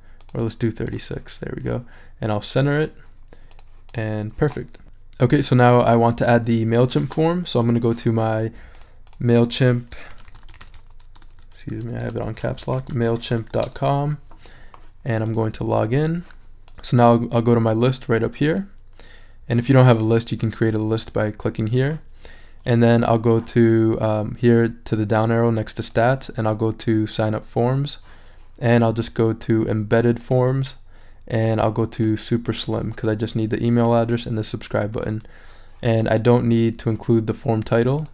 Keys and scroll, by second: 9.9-11.2 typing, 11.7 shift+super+a, 12.0 shift+super+BackSpace, 12.4-13.9 typing.